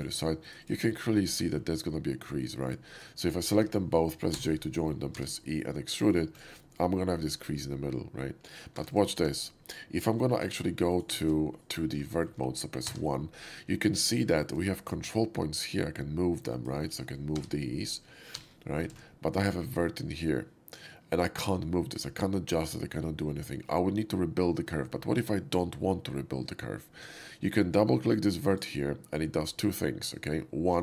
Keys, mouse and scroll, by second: 0.2 right click, 0.6 click, 0.8 middle click, 1.0 middle click, 1.2 shift+middle click, 2.4 shift+middle click, 3.0 shift+middle click, 3.3 scroll down 1, 3.4 a, 4.2 j, 4.5 middle click, 4.6 middle click, 5.1 e, 5.5-5.9 drag, 6.0 right click, 6.2 click, 6.5 middle drag, 7.2 shift+middle drag, 8.7 3, 8.9 click, 9.0 x, 9.2 3, 10.2 shift+x, 10.9 click, 11.1 shift+x, 11.5 click, 12.1 shift+middle click, 12.4 shift+middle click, 12.8 1, 13.0 middle click, 13.2 middle click, 14.1-14.4 shift+middle drag, 16.1-16.6 shift+drag, 17.4 g, 18.6 g, 19.0 ctrl+z, 28.3 click, 28.5 click.